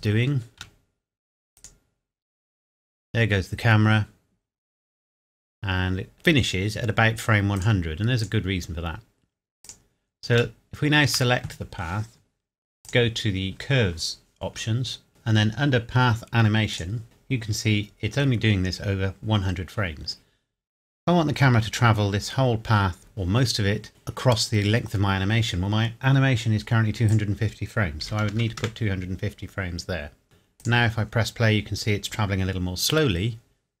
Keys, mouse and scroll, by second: 0.6 shift+middle click, 1.6 click, 2.3 scroll down 1, 7.6 click, 10.6 shift+middle click, 12.8 click, 16.7 click, 27.1 click, 28.0 KP_2, 28.2 KP_5, 28.3 KP_0, 28.6 KP_Enter, 30.6 click.